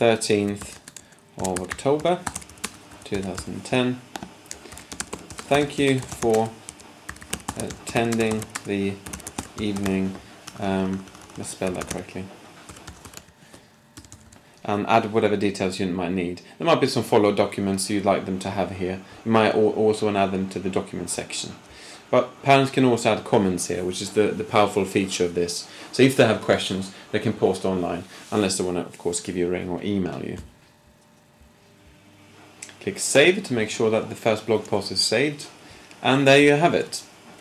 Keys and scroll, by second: 0.0-3.4 typing, 4.7-14.2 typing.